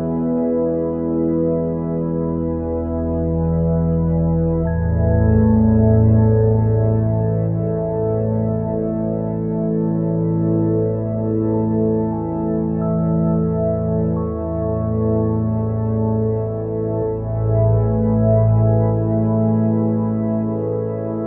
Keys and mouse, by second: 9.3 click, 21.0-21.2 drag.